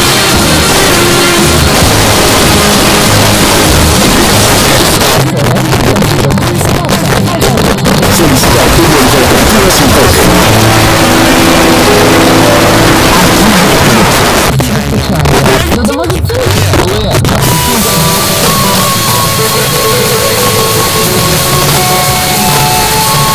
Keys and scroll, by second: 4.8 Page_Down, 8.1 typing, 10.4 typing, 14.0 Page_Down, 16.8 typing.